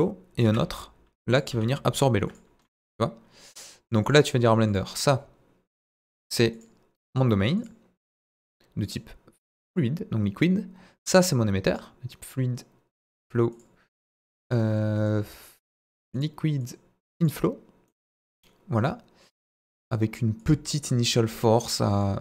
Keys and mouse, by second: 0.4 shift+d, 1.3 click, 1.5 s, 2.2 click, 2.6-3.4 middle drag, 4.0 click, 5.9 click, 6.5 click, 7.1-7.7 drag, 8.8-9.7 drag, 12.2-13.1 drag, 13.6-15.0 drag, 15.7-16.2 drag, 16.7 click, 17.8-18.8 middle drag, 20.4 click, 22.1-22.2 drag.